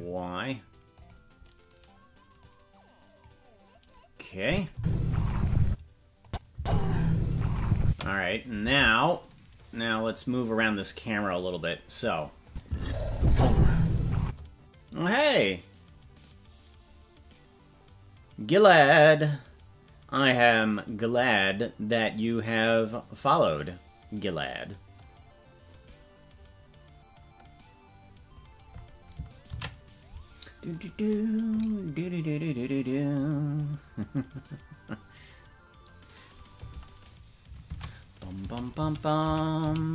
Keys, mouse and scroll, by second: 2.4 click, 4.4 click, 4.7 space, 5.6 space, 6.2 click, 6.5 space, 7.8 space, 8.6 ctrl+Tab, 9.8 right click, 12.4 click, 12.6 space, 14.2 space, 31.8 ctrl+s, 37.6 shift+`.